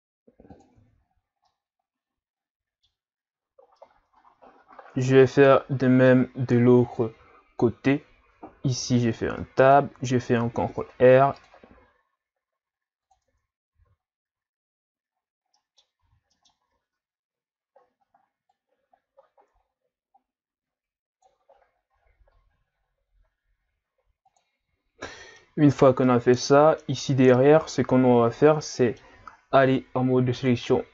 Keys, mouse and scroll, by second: 0.8 Tab, 1.1-1.5 scroll down 3, 1.5-3.3 middle drag, 3.3-3.8 scroll up 4, 3.8-6.8 middle drag, 8.7 Tab, 9.4-10.4 middle drag, 10.4 ctrl+r, 13.3 Tab, 13.7 q, 15.1-15.6 scroll down 3, 15.6 middle click, 16.0 q, 25.1 middle click, 25.7-26.0 scroll up 2, 26.0-27.0 middle drag, 27.0-27.6 scroll up 2, 27.6-28.1 scroll up 3, 28.1 Tab, 28.8 middle click, 29.6 ctrl+Tab.